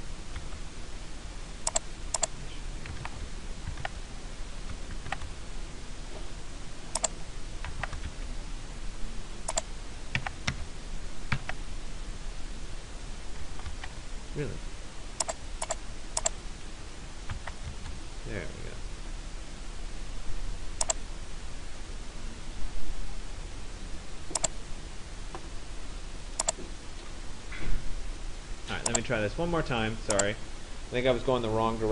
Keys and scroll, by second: 2.7-5.7 typing, 7.5-8.4 typing, 10.3 9, 10.6 0, 11.4 9, 17.0 9, 17.8 0.